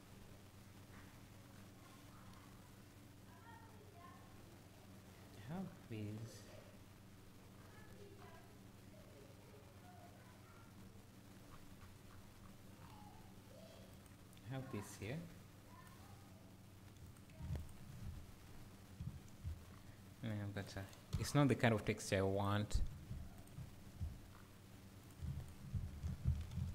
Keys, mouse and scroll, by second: 16.0 click, 17.0 click, 17.6 ctrl+shift+click, 18.4-19.0 scroll up 2, 19.5-20.9 scroll down 1, 20.9 click, 21.2 Delete, 21.8-22.5 scroll up 1, 22.5 click, 23.6 `, 25.1 click, 25.4 ctrl+shift+click, 26.6 alt+a.